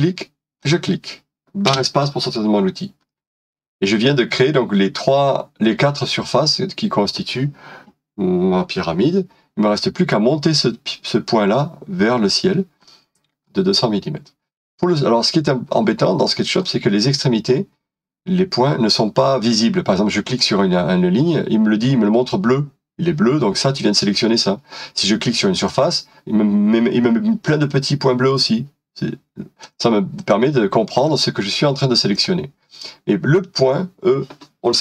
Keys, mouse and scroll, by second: 1.7 i, 3.1 middle click, 12.9 middle click, 14.8 middle click, 15.1-15.5 scroll up 1, 15.7 middle click, 16.6-19.6 scroll up 1.